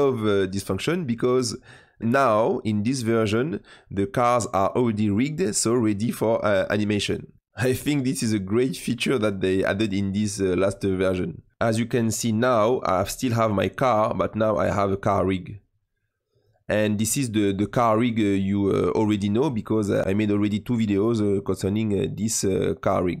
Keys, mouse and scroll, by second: 5.2 click, 7.2 middle click, 7.8-11.5 middle drag, 13.6 click, 14.2 click, 16.2 click, 17.2-17.6 scroll up 5, 17.9 click, 18.4-19.1 middle drag, 19.1 click, 19.4-22.1 middle drag, 22.1 click, 22.9-23.2 scroll down 2.